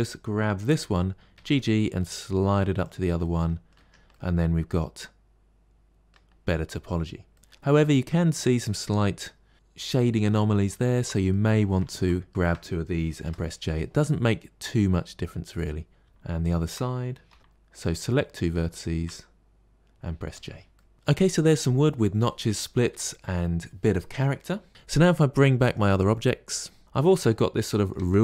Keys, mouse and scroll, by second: 1.2 g, 3.1 middle click, 3.6 Tab, 4.0-6.2 middle drag, 6.2-6.8 scroll down 4, 7.2 middle click, 10.8 ctrl+z, 11.2 middle click, 11.7 ctrl+z, 12.3 shift+click, 13.1 j, 13.6-15.9 middle drag, 16.3 shift+click, 17.2 j, 17.4 middle click, 17.6 click, 18.6 shift+click, 20.1 j, 20.6 middle click, 24.7 alt+h, 25.5 click, 26.1 scroll down 11, 26.8-27.2 middle drag, 27.2 scroll down 5, 27.6-28.2 shift+middle drag.